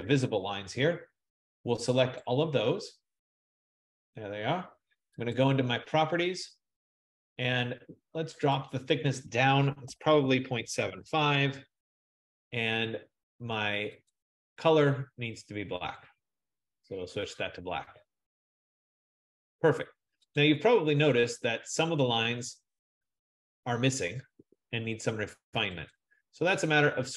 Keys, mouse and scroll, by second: 2.4 click, 5.5 click, 9.3 click, 9.7-11.2 typing, 14.2 click, 16.2 click, 20.4 click, 24.5 F15, 26.4 click.